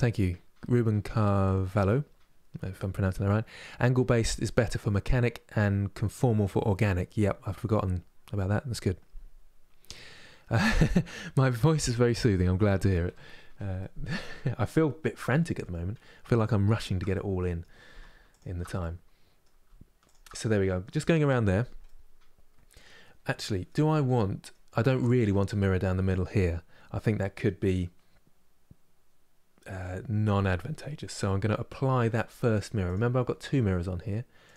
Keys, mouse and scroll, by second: 12.7 KP_Divide, 13.4-14.8 middle drag, 14.8-16.5 scroll down 1, 16.5 shift+click, 16.8-18.0 middle drag, 18.0 alt+shift+click, 18.4-19.7 middle drag, 19.7 shift+click, 20.0-34.5 middle drag.